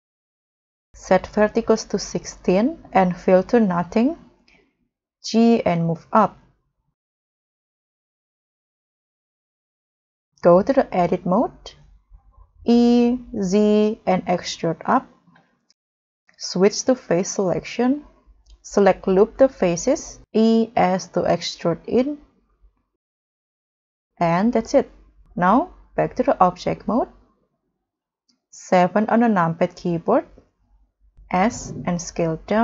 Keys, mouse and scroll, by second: 5.5 g, 6.1 z, 8.4 scroll down 2, 8.7 scroll up 2, 9.1 middle click, 12.5 e, 13.4 z, 16.3-17.2 scroll up 1, 18.7 scroll up 1, 19.9 w, 19.9 e, 23.9 scroll down 2, 24.2 middle click, 26.8 middle click, 28.8 7, 29.0-29.7 scroll down 6, 29.7-30.1 scroll up 4, 30.2 scroll down 1, 30.9 scroll up 1, 31.4 w.